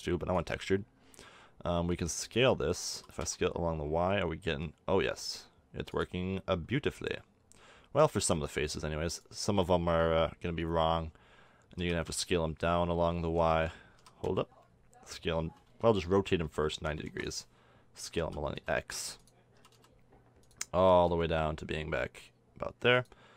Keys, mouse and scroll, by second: 0.5-1.6 drag, 1.6-3.7 middle drag, 2.0 a, 2.4 a, 2.9 s, 6.4-8.3 middle drag, 11.8 s, 13.2-15.4 drag, 14.0 s, 16.4 r, 18.2-19.7 drag, 18.2 s, 19.6 s, 20.8 s.